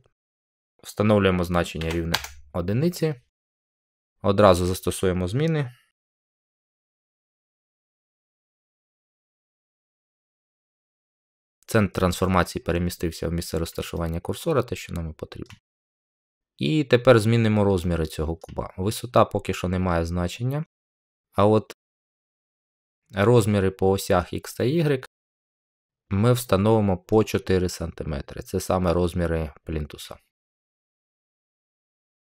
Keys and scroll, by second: 1.7 1, 2.0 Return, 6.6 ctrl+a.